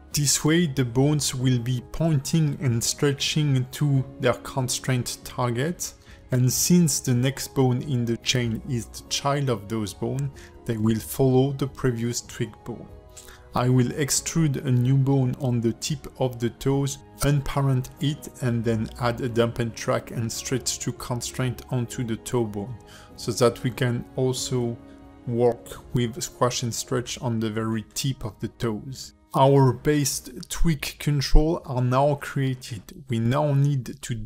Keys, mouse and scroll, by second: 0.9 shift+middle click, 1.5 click, 1.9 g, 3.1 click, 3.4 click, 3.9 shift+click, 4.3 ctrl+shift+c, 5.6 ctrl+shift+c, 7.8 click, 8.2 g, 9.6 shift+middle click, 10.7 click, 11.0-11.4 scroll up 3, 11.4 shift+middle click, 11.8 Tab, 12.2 click, 12.8 e, 14.7 click, 15.8 alt+p, 18.2 shift+middle click, 20.2 ctrl+F2, 22.5 ctrl+F2, 23.3 KP_0, 24.4 Tab, 24.9 shift+click, 25.4 ctrl+shift+c, 26.4 ctrl+shift+c, 27.8 click, 28.0 click, 28.3 click, 28.6 g, 29.2 click, 29.4 g, 29.8 scroll down 3, 30.0 shift+middle click, 30.3 click, 30.6 g, 31.2 scroll down 2, 31.4 shift+middle click, 31.7 click, 31.9-32.5 scroll up 1, 32.5 shift+click, 32.5-33.0 scroll up 1, 33.0 shift+click, 33.3 click, 33.5 scroll down 1, 34.1 shift+middle click, 34.1 scroll down 2.